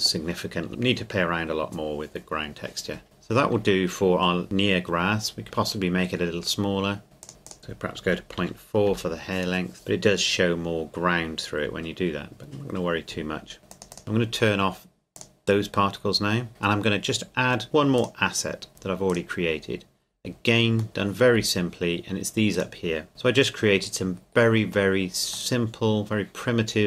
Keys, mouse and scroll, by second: 3.0 click, 7.2 click, 8.0 KP_Decimal, 8.4 KP_4, 8.9 KP_Enter, 13.7 click, 13.9 click, 15.2 click, 18.0 click, 19.7-20.6 scroll down 1, 20.8 middle click, 21.0 scroll down 1, 22.6 right click, 23.1 middle click, 24.1-25.5 scroll up 1, 25.5 middle click.